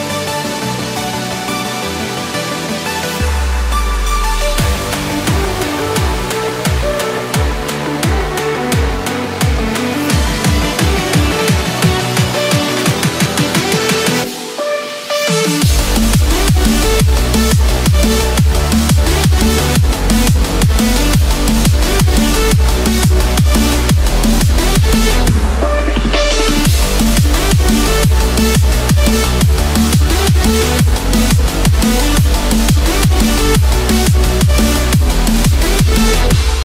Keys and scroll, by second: 0.8 ctrl+-, 4.4 ctrl+0, 9.5 ctrl+=, 22.1 ctrl+-, 23.3 ctrl+=.